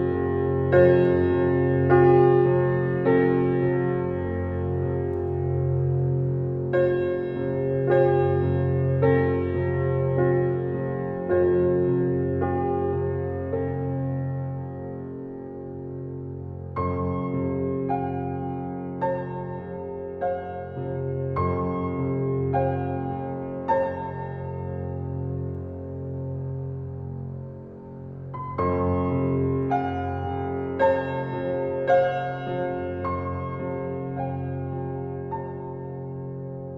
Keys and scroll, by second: 1.8 Right, 3.6 Right, 5.5 Right, 7.9 Right, 10.1 Right, 13.5 Right, 18.9 Right, 26.0 Right, 29.2 Right, 30.3 Right, 30.4 Right, 30.7 Left, 31.0 Left, 32.6 Right, 35.6 Right.